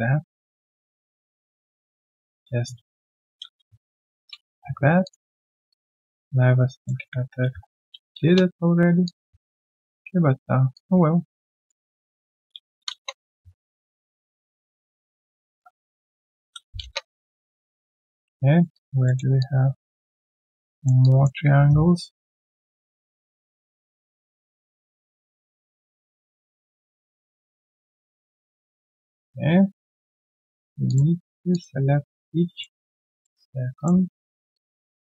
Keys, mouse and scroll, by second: 1.1 Tab, 3.2 ctrl+alt+q, 4.1 Return, 5.3 Tab, 7.1 Tab, 7.4 ctrl+alt+q, 8.2 Return, 9.0 alt+click, 12.5 ctrl+alt+q, 12.9 Return, 14.1 ctrl+alt+q, 14.3 Return, 16.1 ctrl+alt+q, 16.8 Return, 18.5 alt+right click, 18.7 alt+click, 19.0 alt+middle click, 19.4 alt+click, 20.7 alt+middle click, 21.0 alt+click, 21.6 right click, 21.6 q, 24.5 q, 25.3 right click, 26.8 shift+click, 27.4 shift+right click, 27.4 click, 28.6 q, 28.6 right click, 29.6 right click, 30.8 shift+click, 32.5 shift+click.